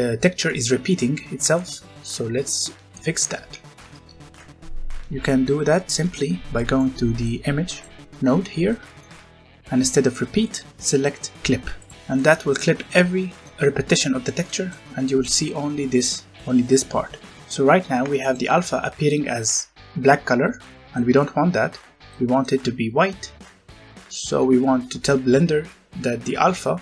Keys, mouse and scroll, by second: 3.4 Tab, 5.2 click, 6.1 scroll up 1, 6.5 middle click, 7.2 click, 8.0 scroll up 1, 8.6 middle click, 10.4 click, 11.9 scroll down 1, 12.1 middle click, 17.8 scroll down 1, 18.2 shift+middle click, 23.7-24.0 scroll up 1, 24.0 middle click.